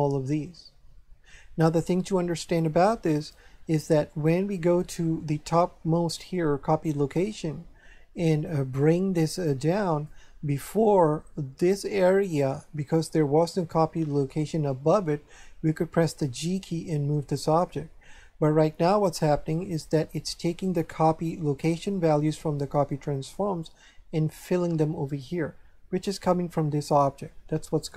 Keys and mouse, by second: 3.2 click, 8.4 click.